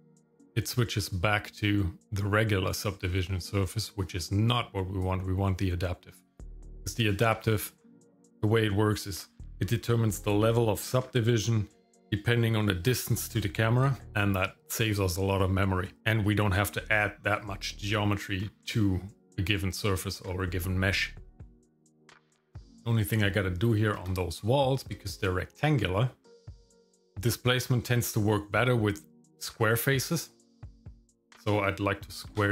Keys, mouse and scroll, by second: 5.0-6.4 drag, 22.2-23.3 drag, 23.3 Tab, 24.6 shift+middle click, 32.3 ctrl+r.